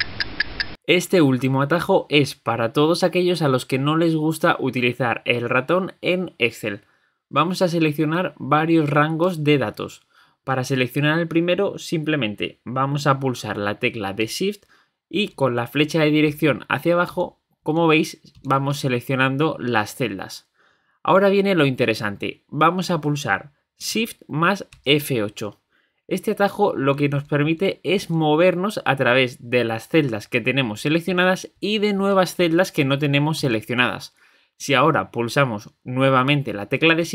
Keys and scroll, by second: 23.8 F8.